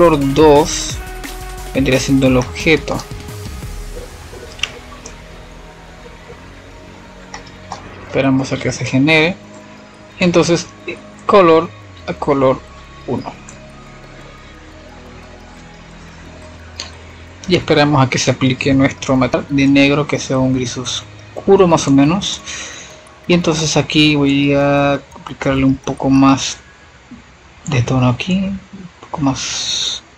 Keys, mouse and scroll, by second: 1.7 middle click, 2.5 click, 3.0 shift+a, 7.7 click, 19.6-20.0 drag, 20.7-21.5 middle drag, 21.5 shift+a, 29.8 F7, 30.0 F7.